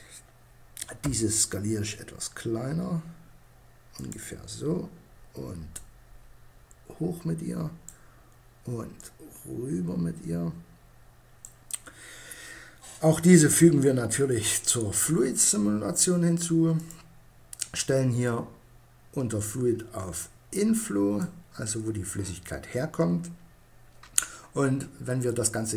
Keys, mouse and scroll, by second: 0.2 s, 3.2-6.5 drag, 8.2-9.7 drag, 13.7-15.4 drag, 15.9-18.6 drag.